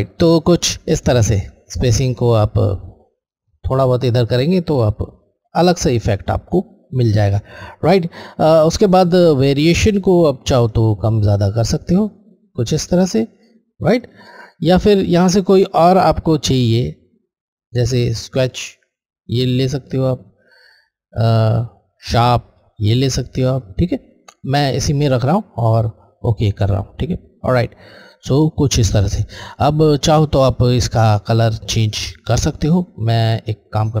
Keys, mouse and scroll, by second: 9.7 click, 9.8 click, 17.6 click, 18.2 click, 21.9 click, 26.8 Left, 33.5 click.